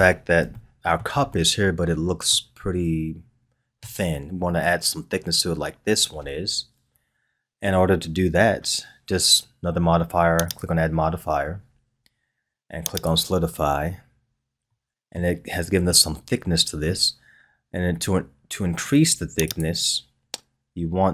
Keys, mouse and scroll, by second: 0.1-0.5 scroll down 1, 0.5-4.4 shift+middle drag, 10.4-13.5 drag, 14.7-18.9 middle drag, 19.4 click.